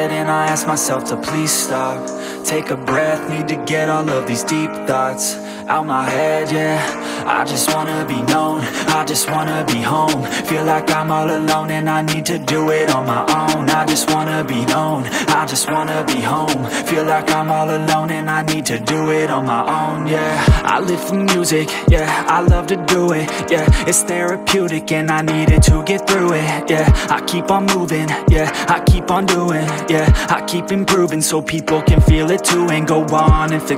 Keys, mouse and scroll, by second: 30.0 click, 31.0 click, 31.8 KP_0.